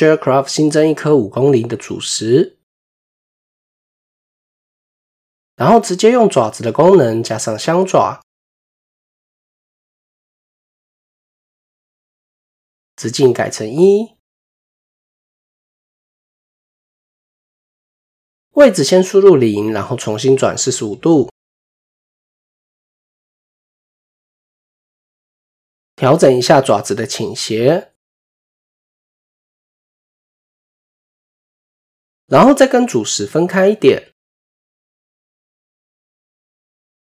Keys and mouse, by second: 6.1 click, 7.8 click, 9.1 typing, 9.2-10.0 middle drag, 10.7-11.8 drag, 12.5-13.7 drag, 16.9-18.8 drag, 18.7 KP_7, 21.1-22.5 drag, 24.1-24.6 middle drag, 25.5 KP_1, 26.6-29.4 drag, 29.9 middle drag, 30.5 KP_7, 32.4-34.4 drag, 34.6-36.0 drag, 36.5 middle click.